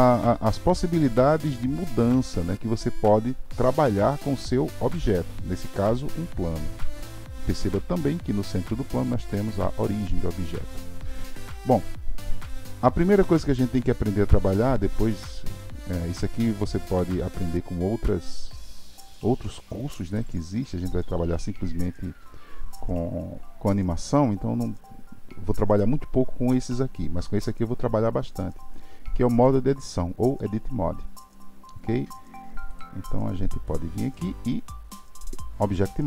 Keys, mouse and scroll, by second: 0.7-3.9 drag, 7.1 click, 12.4-15.5 drag, 33.6-36.0 drag.